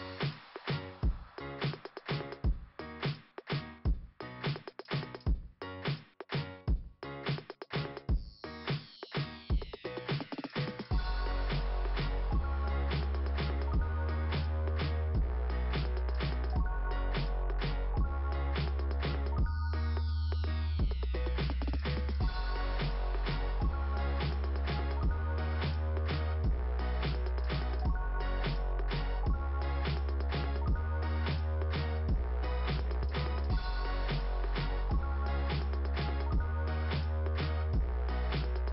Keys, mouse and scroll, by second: 13.0 click, 17.2 click, 18.5 click, 19.1 click, 21.8 click, 22.7 click, 23.7 click, 24.4 click, 26.4 click, 27.2 click, 28.3 scroll up 2, 32.1 scroll down 2, 34.6 click, 35.5 click, 38.1 scroll down 2.